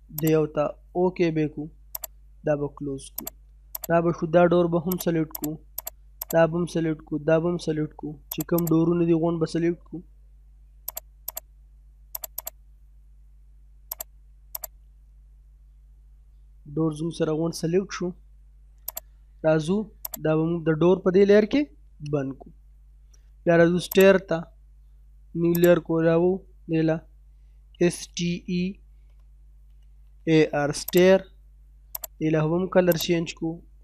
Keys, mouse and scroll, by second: 2.6 scroll up 1, 3.2 click, 4.1-4.6 scroll down 1, 4.9 click, 6.6 scroll down 1, 6.8 middle click, 7.5-8.1 scroll up 1, 8.3 click, 8.9 scroll down 1, 9.2 middle click, 9.6-10.0 scroll down 1, 10.0 middle click, 10.5 scroll up 1, 10.9 click, 11.9 scroll up 1, 12.2 click, 12.7 scroll down 1, 13.2 middle click, 13.6 scroll up 1, 13.9 click, 14.9-15.4 scroll down 1, 16.1 middle click, 16.5-16.9 scroll down 1, 16.9-18.9 middle drag, 18.9 click, 21.6 middle click, 22.4 scroll up 1, 22.7 middle click, 23.9 click, 27.0-29.0 typing, 30.8 click.